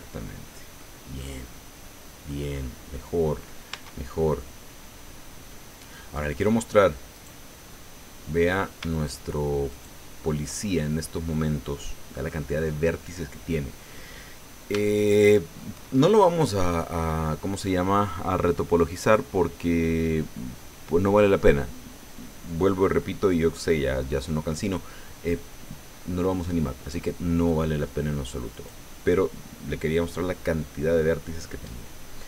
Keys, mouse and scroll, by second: 1.2-2.5 drag, 2.5 scroll up 2, 2.9 click, 3.7 Tab, 4.0-4.3 scroll down 1, 4.4-6.1 drag, 7.1 right click, 8.2-8.5 scroll down 1, 8.9 shift+right click, 9.7 shift+right click, 11.6-14.0 drag, 14.3-14.6 scroll up 2, 14.8 shift+click, 28.5 right click.